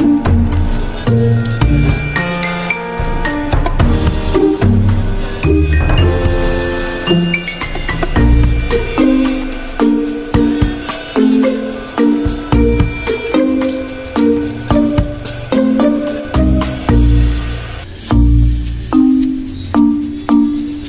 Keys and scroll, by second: 5.6 ctrl+alt+2.